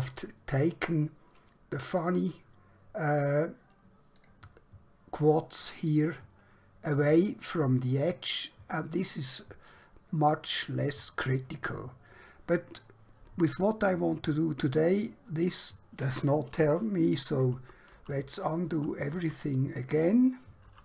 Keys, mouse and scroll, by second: 2.0 click, 17.2 ctrl+Num_Lock, 17.5 ctrl+z, 17.9 ctrl+z, 18.2 ctrl+z, 18.7 ctrl+z, 19.1 ctrl+z, 20.6 ctrl+z.